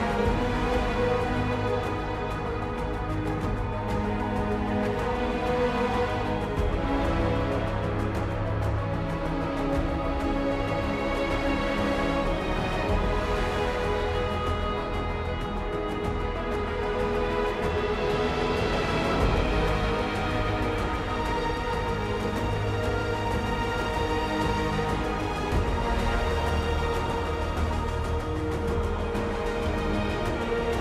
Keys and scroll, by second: 1.3 ctrl+j, 1.5 ctrl+t, 5.3 ctrl+j, 5.5 ctrl+t, 11.4 F10, 20.5 F10.